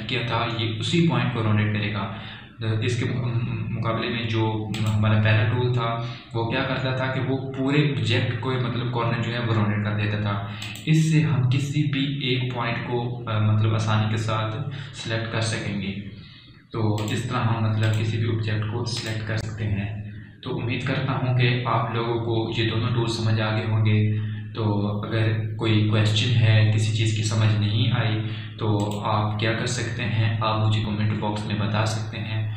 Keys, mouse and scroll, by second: 6.2 click, 12.1 click, 18.5 click, 30.3 click.